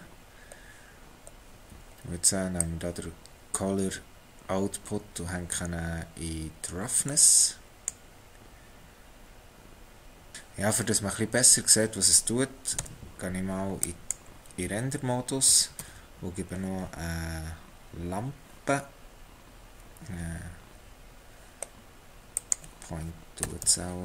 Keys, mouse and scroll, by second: 2.6 click, 10.3 middle click, 12.8 z, 15.8 shift+a, 23.4 g.